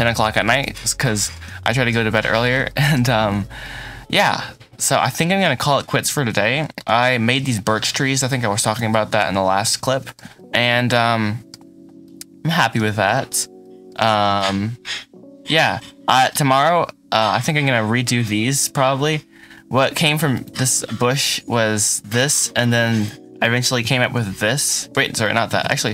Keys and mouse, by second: 0.0 shift+middle click, 0.4 ctrl+middle click, 0.7 ctrl+s, 1.2 shift+middle click, 1.7 shift+middle click, 2.3-3.5 shift+middle drag, 3.2 ctrl+s, 3.7 middle click, 5.4 shift+middle click, 6.0 ctrl+s, 6.3-7.3 shift+middle drag, 8.1 middle click, 8.8 shift+middle click, 10.1 shift+middle click, 10.6 middle click, 11.3 middle click, 12.5 shift+middle click, 13.5 drag, 14.2-15.6 shift+middle drag, 16.4-17.2 shift+middle drag, 21.0 click, 22.8 click, 23.7 KP_Decimal, 24.5 click, 25.0 shift+click, 25.2 shift+middle click, 25.7 middle drag.